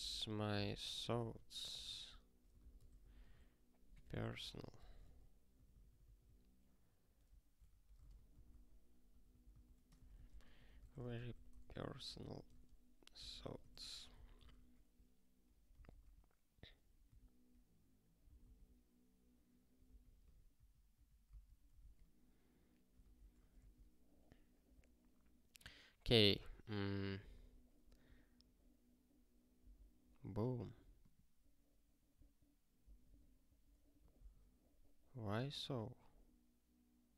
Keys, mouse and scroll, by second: 0.0-1.0 typing, 1.6 ctrl+n, 1.8 ctrl+n, 2.0 ctrl+e, 2.5 alt+b, 2.7 alt+d, 3.0-4.7 typing, 5.0 ctrl+s, 5.5 ctrl+n, 5.6 ctrl+n, 5.8 ctrl+n, 6.0 ctrl+n, 6.2 ctrl+n, 7.6 ctrl+a, 8.0 ctrl+space, 8.3 ctrl+w, 8.4 ctrl+p, 9.0 ctrl+p, 9.5 Return, 9.7-13.1 typing, 14.1 Return, 14.4 ctrl+s, 15.8 super+b, 17.1 super+w, 18.2 super+b, 19.8 super+b, 21.2 super+b, 21.9 ctrl+k.